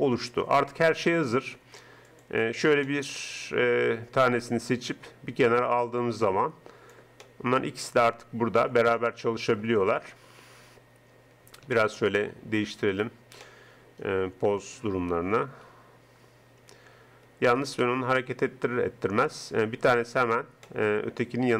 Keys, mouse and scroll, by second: 2.3 right click, 2.9-4.0 middle drag, 7.2 middle click, 13.6 middle click, 14.6 middle click, 15.8 g, 20.2-21.5 right drag.